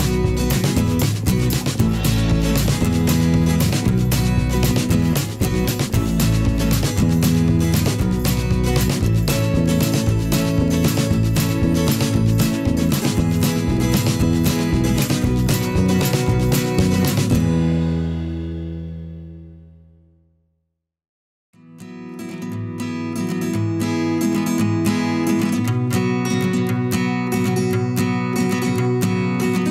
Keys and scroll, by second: 8.5 Return, 19.7 ctrl+t, 23.9 Return, 26.3 ctrl+j.